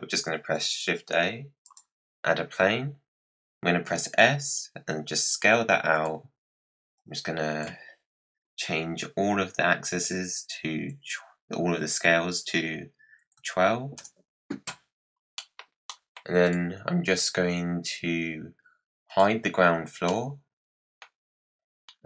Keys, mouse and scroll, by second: 0.5 shift+a, 3.8 s, 6.9-10.0 drag, 15.3 middle click, 15.6 scroll down 4, 15.8 middle click, 16.4 drag, 19.0 click, 20.0-21.5 middle drag, 21.5-22.0 scroll up 1.